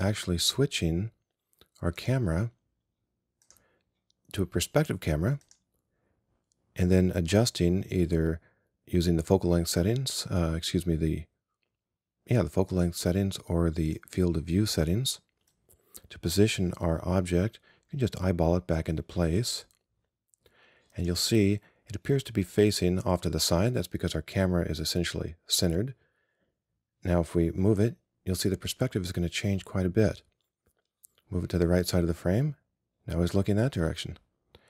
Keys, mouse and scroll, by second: 2.1-5.3 right drag, 5.5-17.6 right drag, 27.8-29.9 drag.